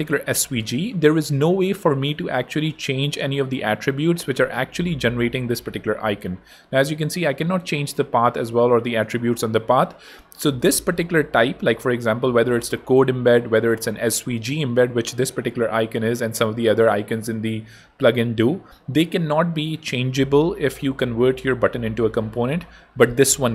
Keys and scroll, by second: 22.5 BackSpace, 23.1 Escape.